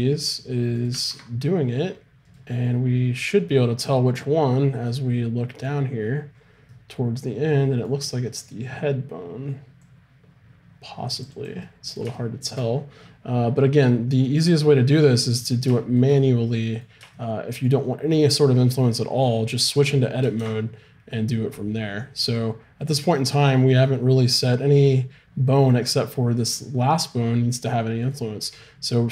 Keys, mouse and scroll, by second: 1.1 ctrl+Tab, 9.9-13.7 drag, 20.4 ctrl+Tab, 23.9 click, 24.4-29.1 right drag.